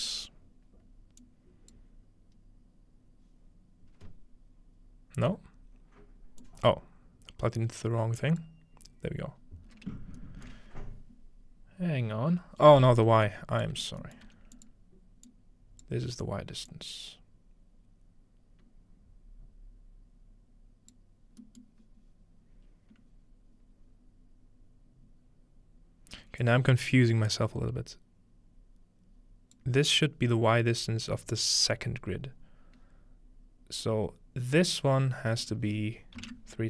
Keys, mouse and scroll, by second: 1.2-3.6 ctrl+drag, 6.4-9.3 drag, 9.4-10.6 scroll up 2, 10.2-10.6 shift+middle drag, 13.3 middle click, 13.7-22.5 drag, 14.3 g, 14.6 middle click, 15.3 middle click, 21.4-22.6 middle drag, 22.6-23.7 scroll up 1, 23.7-24.2 scroll down 2, 26.4-30.1 drag, 30.0-31.2 scroll down 2, 32.4-34.3 scroll up 2, 35.4-36.6 drag.